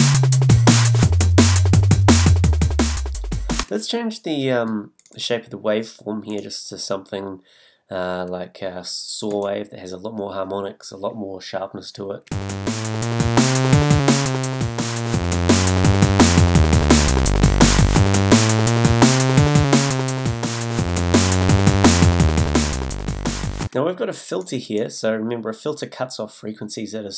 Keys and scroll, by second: 3.6 space, 12.3 space, 23.6 space.